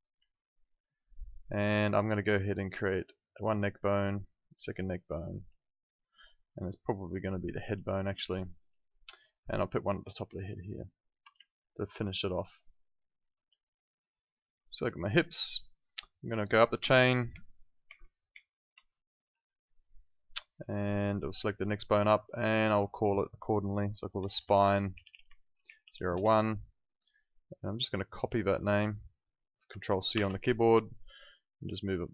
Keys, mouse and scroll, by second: 0.3 alt+middle click, 3.4 click, 8.3 alt+middle click, 10.4 click, 11.1 w, 11.4 alt+middle click, 11.9 alt+right click, 16.8 Up, 17.3 Down, 17.9 Up, 18.7 Right, 19.3 Left, 20.5 click, 24.0-26.3 typing, 27.7 click, 30.1 ctrl+c, 31.1 click.